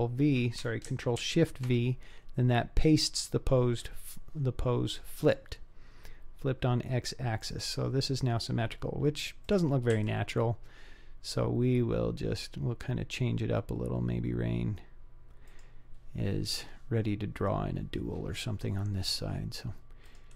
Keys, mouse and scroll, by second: 1.3 ctrl+shift+v, 5.3 click, 7.4 click, 9.5 click, 10.0 g, 20.1 click.